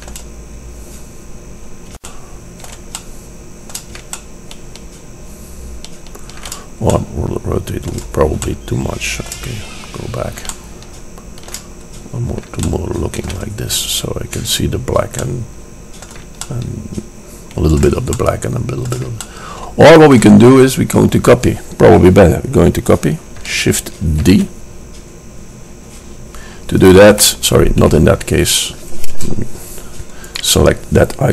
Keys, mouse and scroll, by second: 0.4 middle click, 6.3-7.1 middle drag, 21.4-23.0 middle drag, 24.4 shift+d, 28.0 Escape, 29.2 KP_0.